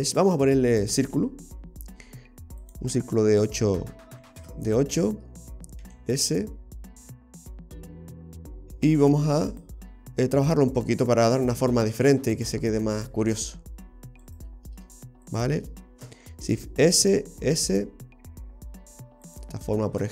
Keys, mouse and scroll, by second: 2.7 click, 2.8 click, 3.6 click, 5.9 s, 7.8-8.5 scroll up 1, 8.5-8.9 scroll down 2, 9.6 click, 11.4 right click, 13.0 click, 14.3 right click, 15.3 shift+right click, 16.5 shift+s, 17.4 s.